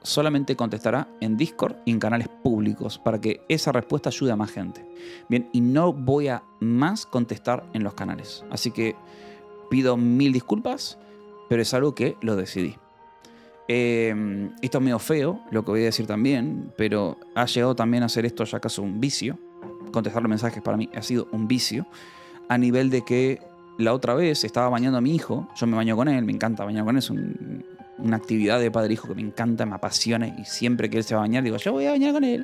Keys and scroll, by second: 0.3 =.